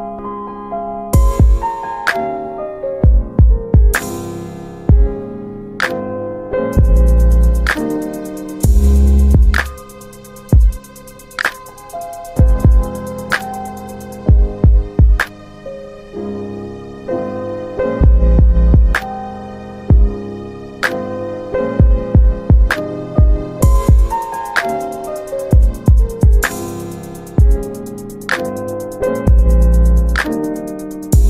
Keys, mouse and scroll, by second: 4.7 ctrl+alt+middle click, 5.6 click, 10.2 alt+r, 12.9 click, 15.5 alt+middle click, 16.7 click, 18.7 alt+middle click, 20.8 shift+click, 23.6 click, 24.5 click, 27.0 right click, 28.9 click.